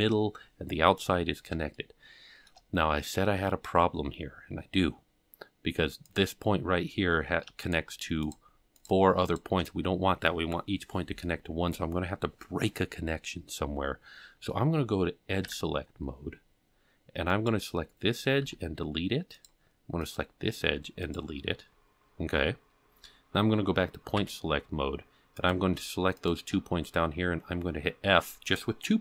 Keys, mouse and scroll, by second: 1.8 shift+middle click, 2.9-3.3 scroll up 3, 4.3-4.7 scroll up 4, 6.1 click, 7.7 shift+click, 8.3 shift+click, 8.8 shift+click, 9.3 shift+click, 15.5 2, 17.3 click, 18.5 x, 20.0 click, 20.7 x, 22.0-23.1 scroll down 3, 23.1 scroll down 1, 24.2 1, 25.4 click, 26.2 shift+click.